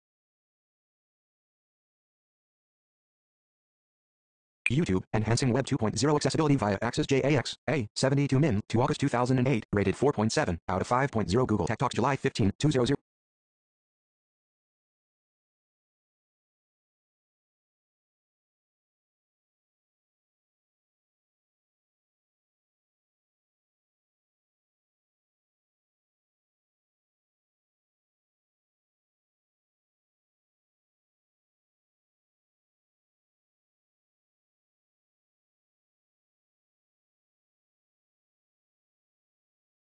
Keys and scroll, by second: 3.7 Return.